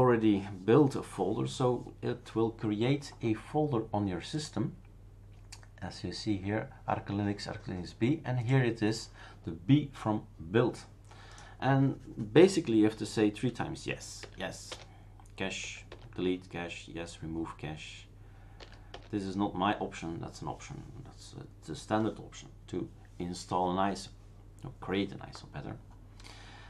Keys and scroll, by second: 14.2 typing, 14.7 Return, 15.9 Return, 16.1 typing, 18.6 y, 18.9 Return.